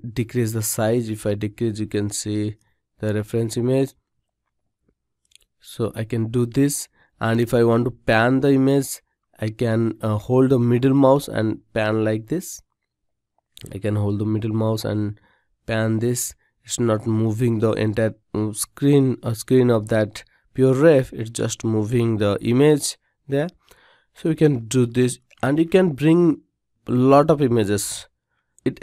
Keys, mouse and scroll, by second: 9.9-14.9 middle drag.